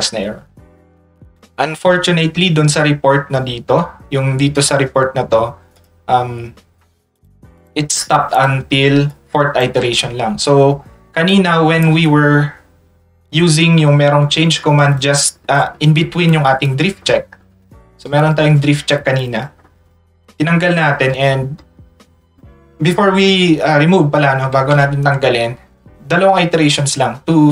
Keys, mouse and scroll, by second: 5.7 click, 7.2 ctrl+click, 7.6 click, 8.0 click, 8.3 click, 9.1 ctrl+click, 11.3 ctrl+click, 13.9 click, 14.2 click, 14.4 click, 14.6 click, 14.8 click, 15.0 click, 15.1 click, 15.4 click, 15.6 click, 15.7 click, 16.3 click, 16.7 click, 17.0 click, 17.4 click, 17.6 click, 17.8 click, 18.2 click, 18.7 click, 19.2 click, 19.4 click, 19.6 click, 19.9 click, 20.6 click, 26.5 click.